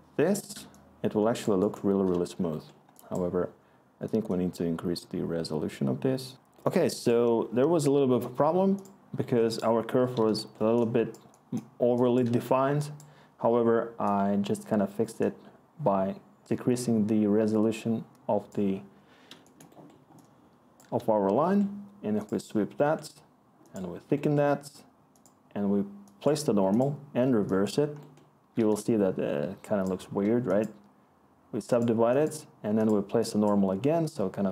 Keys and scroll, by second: 5.9 Return, 12.1-13.3 scroll, 19.8 scroll.